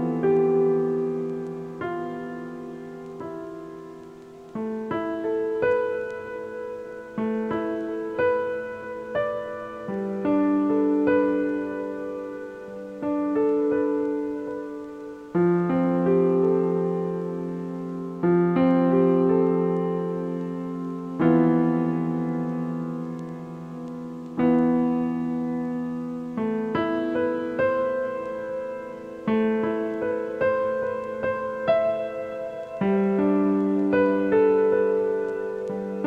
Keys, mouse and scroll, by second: 0.9 click, 2.0-3.3 drag, 12.8 click, 14.2-15.8 drag, 24.7 click, 27.4-29.1 middle drag, 29.1 click, 29.5-30.6 shift+middle drag, 30.6-31.0 scroll up 7, 31.3-31.8 shift+middle drag, 31.8-32.5 scroll up 9, 33.9 click, 35.0-36.0 drag.